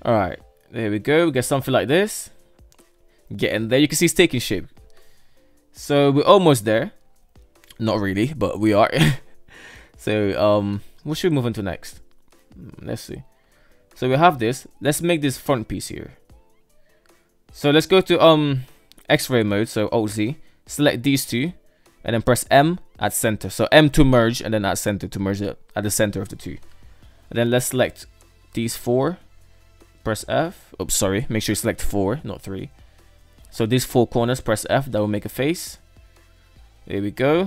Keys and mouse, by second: 0.4 shift+middle drag, 1.3-3.3 middle drag, 5.1-5.7 middle drag, 6.7 right drag, 7.0 middle drag, 7.2-10.6 middle drag, 11.3 KP_3, 12.7-13.1 shift+middle drag, 13.9 shift+middle drag, 15.1 shift+middle click, 15.9 Tab, 17.9 click, 18.2 alt+z, 20.4 click, 21.5 m, 25.6 shift+middle click, 26.4 right click, 28.0 shift+right click, 28.6 shift+right click, 29.5 f, 30.6 ctrl+z, 31.0 shift+right click, 33.4 f, 34.3 alt+z, 35.1 alt+z, 35.3-36.2 middle drag, 36.8 alt+z, 37.2 Tab.